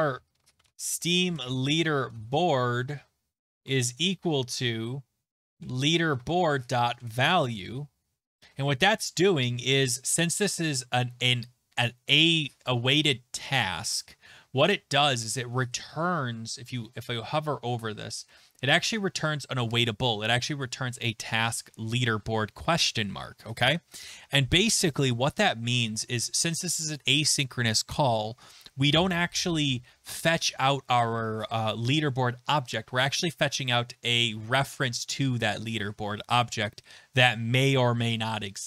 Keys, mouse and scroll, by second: 0.0-8.0 typing.